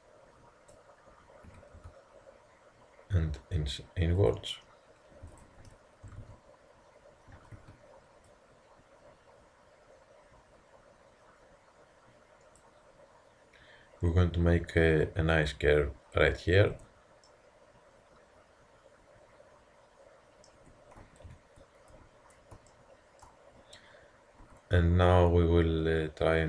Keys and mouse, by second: 1.5 s, 5.3-7.3 drag, 6.1 g, 8.3-10.2 drag, 16.8 Tab, 21.3 ctrl+KP_3, 22.2 middle drag, 22.8 middle drag, 22.9 middle drag, 23.1-24.7 middle drag, 24.5 Tab.